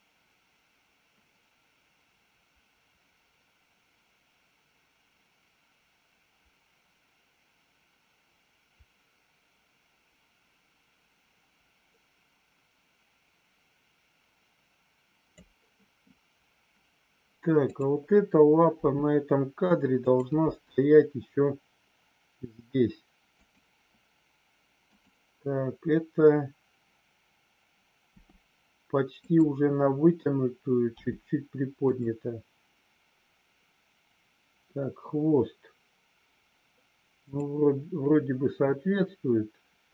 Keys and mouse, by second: 17.6 click, 18.7 r, 20.0 click, 20.3 g, 23.3 click, 28.1 r, 31.0 g, 31.8 click, 37.1 click.